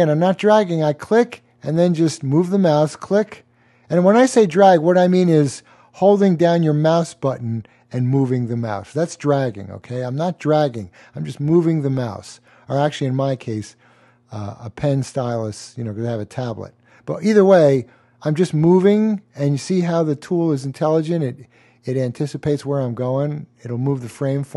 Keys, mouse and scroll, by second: 0.8 click, 11.9 click, 15.2 click, 21.9 click.